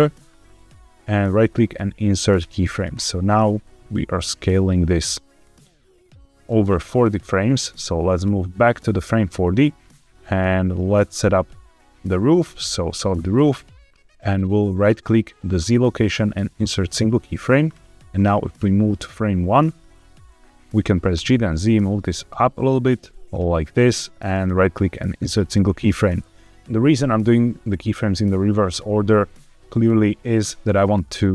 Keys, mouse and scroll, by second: 1.1-2.5 right drag, 3.5-7.5 drag, 8.1 click, 12.3 click, 12.9 shift+middle click, 15.5-16.9 right drag, 18.0-19.5 drag, 19.9 scroll down 1, 21.0 g, 21.2 z, 23.2 click, 24.3-25.5 right drag, 29.2-31.3 drag.